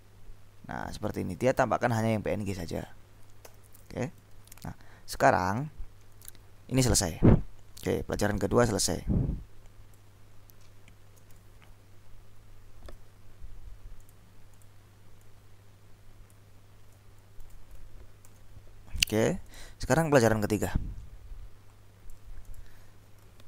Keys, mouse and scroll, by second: 3.5 ctrl+l, 4.5 Up, 5.6 Up, 6.1 Down, 8.1-10.6 drag, 11.9 shift+Left, 14.1 click, 15.4-16.9 drag, 17.3 shift+Left, 18.3 ctrl+s, 19.5 click, 20.4-23.2 drag.